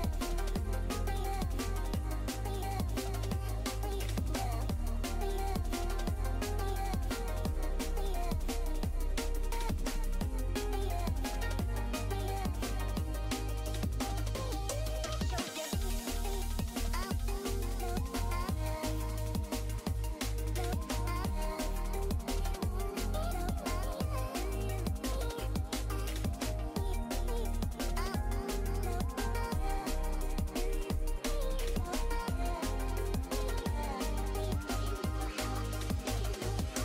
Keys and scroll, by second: 3.4 s, 17.5 s, 17.9 s, 25.8 s, 26.8 s, 30.7 s.